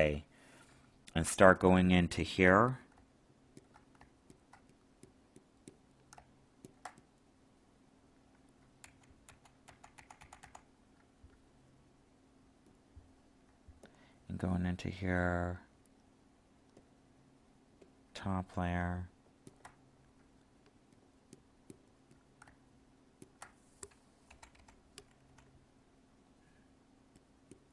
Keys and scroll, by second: 8.8 ctrl+z.